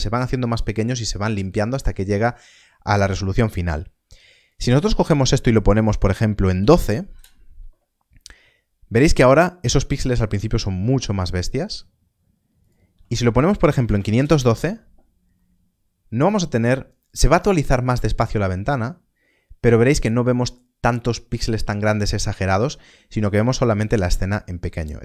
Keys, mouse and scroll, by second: 4.4 middle click, 6.4 click, 7.1 Return, 8.4 middle click, 12.5 click, 13.6 Left, 13.8 5, 13.9 2, 14.2 Return, 15.3 middle click.